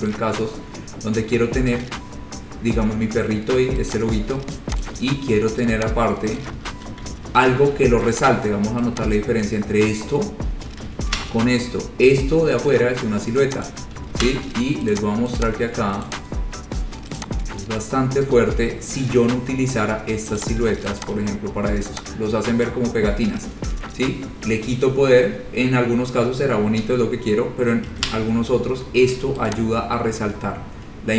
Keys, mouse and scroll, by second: 0.7 scroll, 4.1 click, 5.0 click, 6.6 click, 6.9 ctrl+z, 7.7 ctrl+u, 8.4 click, 9.7 click, 11.2 ctrl+z, 13.9 click, 14.3 ctrl+z, 15.1 click, 15.6 click, 16.1 click, 17.4 click, 17.9-20.1 scroll, 20.6 click, 21.2 shift+click, 21.4 scroll, 22.9 click, 27.4 click, 28.1 click, 28.2 ctrl+z, 29.7 click, 29.9 scroll down 3, 30.1 scroll up 4, 30.6 scroll down 2, 30.9-31.1 scroll.